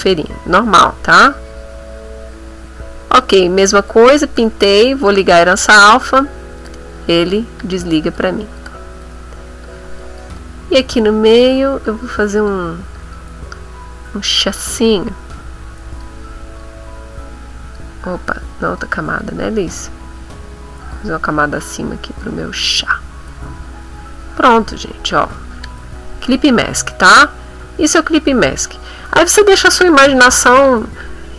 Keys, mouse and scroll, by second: 0.0-4.1 drag, 4.2 click, 5.3 click, 6.7 click, 7.6 click, 8.2 click, 9.2 middle click, 9.6 click, 10.3 shift+click, 11.3 click, 11.9 click, 12.9 click, 14.7 click, 15.3 click, 16.6-17.9 drag, 18.7 ctrl+z, 19.2 ctrl+click, 20.8 click, 21.8-25.9 drag, 25.9 ctrl+middle click, 25.9-27.3 ctrl+scroll up 5, 26.7 ctrl+middle click, 27.6 click, 28.7 middle click.